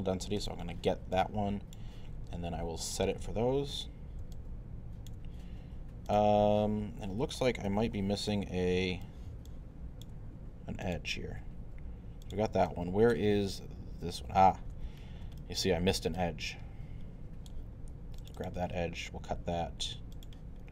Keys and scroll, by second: 7.7 w.